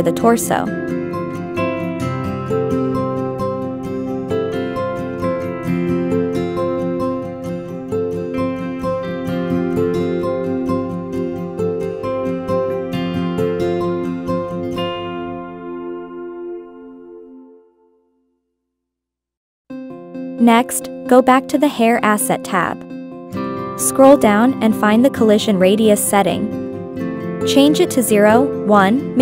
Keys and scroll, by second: 1.2 Left, 1.5 Right, 1.7 Right, 2.0 Left, 3.2 Down, 3.3 Right, 3.5 Right, 3.9 Right, 3.9 Up, 6.5 Left, 6.9 Left, 8.5 Right, 8.9 Right, 9.0 Right, 9.4 Left, 9.6 Left, 10.0 Left, 11.1 Up, 15.5 Up, 15.9 Down, 16.2 Up, 16.8 Up, 17.2 Down, 17.6 Left, 17.9 Right, 18.1 Up, 18.4 Left, 18.8 Down, 19.5 Up, 20.3 Down, 20.6 Left, 21.3 Right, 21.9 Right, 22.5 Right, 27.8 1, 28.3 Return.